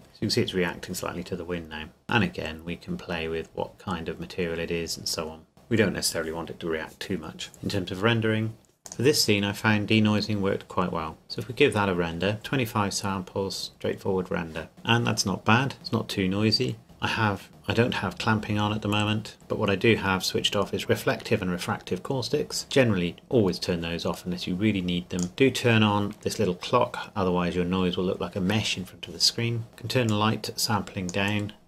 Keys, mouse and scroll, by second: 2.0 click, 5.5 click, 8.9 click, 11.2 click, 11.8-12.5 scroll up 1, 16.1-17.4 scroll down 1, 19.3-20.8 scroll down 1, 25.2 click, 30.1 click, 30.4 click.